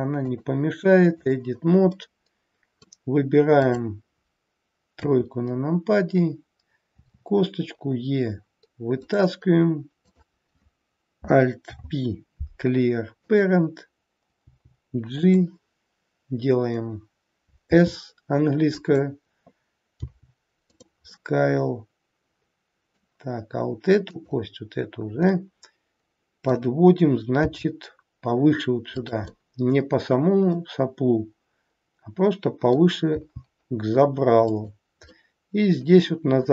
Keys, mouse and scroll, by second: 0.1 click, 1.9 middle click, 3.5 click, 4.9 KP_3, 7.0 e, 11.5 alt+p, 14.4 g, 20.0 g, 21.1 middle click, 24.0 click, 25.4 middle click, 27.3 g, 29.3 middle click, 33.0 g, 35.0 middle click.